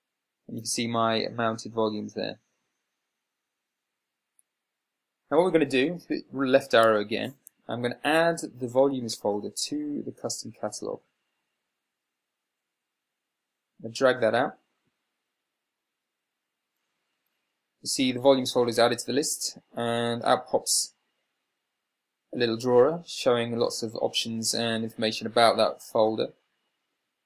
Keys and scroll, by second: 3.8 Up, 7.2 Left.